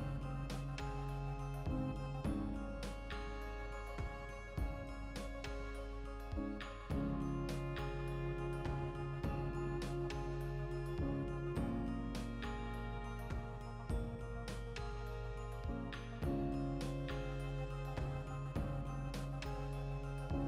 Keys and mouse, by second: 0.9 ctrl+middle click, 1.2 right click, 1.4 l, 2.0 shift+d, 3.0 right click, 3.9 shift+Tab, 4.1 g, 4.3 right click, 4.7 g, 5.9 shift+click, 6.6 x, 6.7 click, 7.0 x, 7.5 right click, 7.7 l, 8.0 shift+d, 9.6 shift+click, 9.8 shift+r, 10.3-11.3 shift+middle drag, 10.7 Tab, 11.3 click, 11.7 right click, 12.0 Tab, 12.4 right click, 13.1 g, 13.4 click, 13.5 shift+Tab, 13.7 g, 14.3 click, 14.9 shift+Tab, 15.2 ctrl+middle click, 15.4 e, 16.1 click, 16.2-17.4 middle drag, 17.4 click, 17.8 middle click, 18.7-20.4 drag.